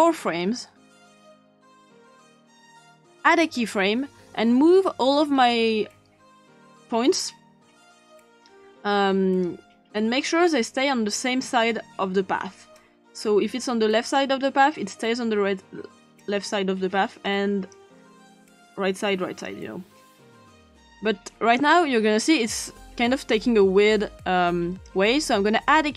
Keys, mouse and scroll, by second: 0.0-1.0 scroll up 2, 1.0-2.9 scroll down 2, 2.9 scroll down 1, 3.1 click, 7.2-8.4 drag, 9.4-11.5 drag, 12.8-14.2 drag, 15.0-16.2 drag, 17.3-17.8 drag, 18.4-19.5 drag, 20.2-21.0 drag, 22.6 click.